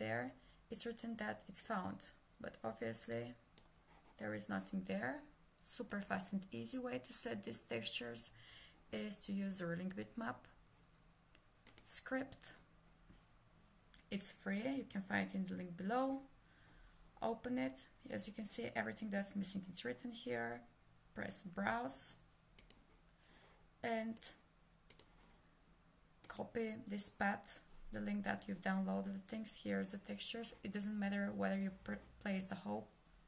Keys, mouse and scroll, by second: 3.2 click, 9.9 click, 22.6 click, 25.0 click.